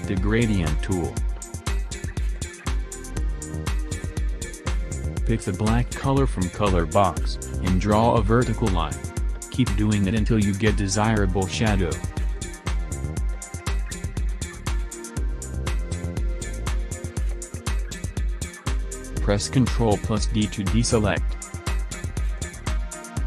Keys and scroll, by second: 18.5 ctrl+d.